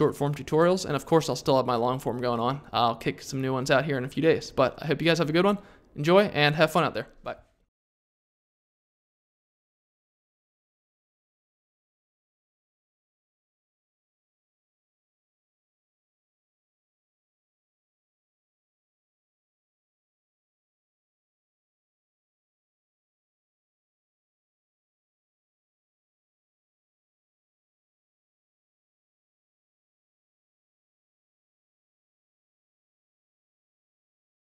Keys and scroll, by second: 11.6-12.5 typing, 19.2 super+i, 19.8 6, 23.3 1, 24.4 5, 25.4 2, 30.4 1.